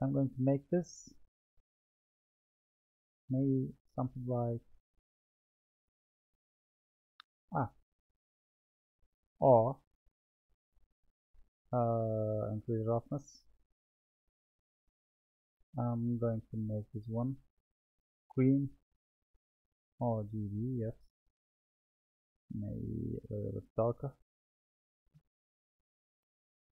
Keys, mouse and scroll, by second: 0.5 click, 2.6 click, 3.5-6.6 drag, 7.4 click, 12.5-13.8 drag, 14.7 click, 15.7 click, 17.2-18.3 drag, 23.1 click, 24.6 click.